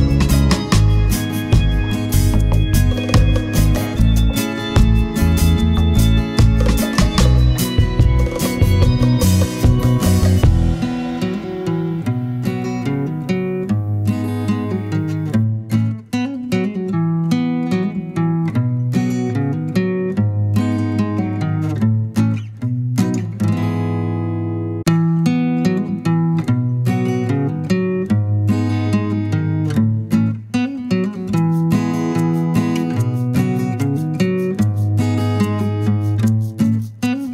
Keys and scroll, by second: 5.2 super+d, 5.9 super+d, 6.7 super+d, 24.5 BackSpace, 26.0 BackSpace, 30.5 BackSpace.